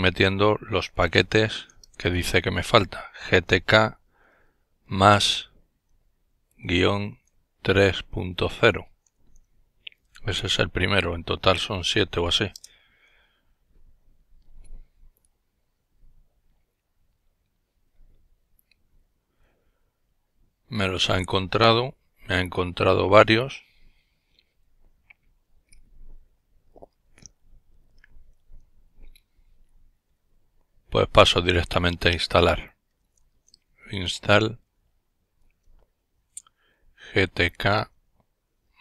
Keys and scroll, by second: 0.0-2.0 typing, 3.5 typing, 4.9 typing, 6.5 typing, 7.7 typing, 9.0 typing, 12.8 Return, 32.6-34.8 typing, 36.2-37.4 typing.